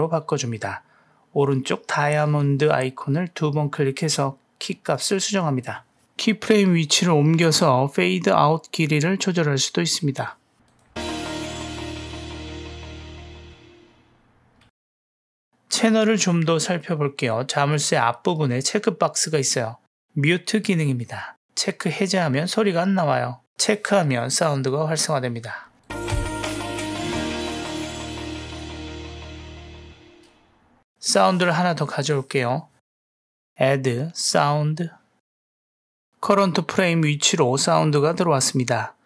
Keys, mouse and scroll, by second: 2.8 click, 3.2 click, 5.7-6.1 drag, 6.3 g, 10.7 drag, 10.9 space, 14.7 space, 15.6 click, 15.9 middle click, 22.6 click, 23.0 space, 25.9 click, 30.9 space, 32.2 middle click, 32.6 ctrl+middle click, 33.8-35.4 drag.